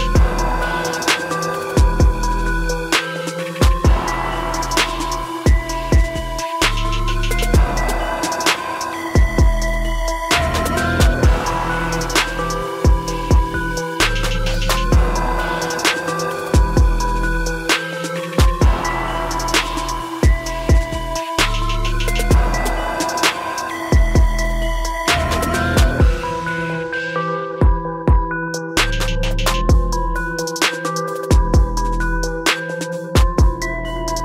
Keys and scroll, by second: 21.0 ctrl++.